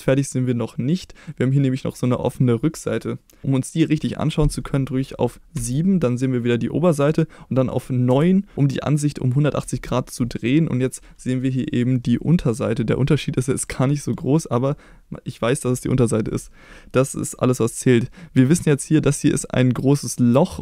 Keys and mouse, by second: 5.6 KP_7, 8.1 KP_9.